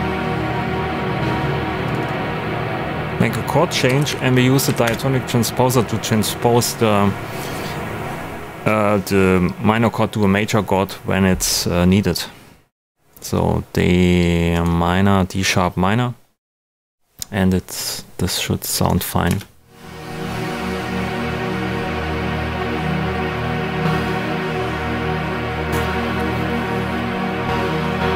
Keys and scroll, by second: 3.6-4.5 typing, 4.6 Down, 4.8 Return, 19.2 space.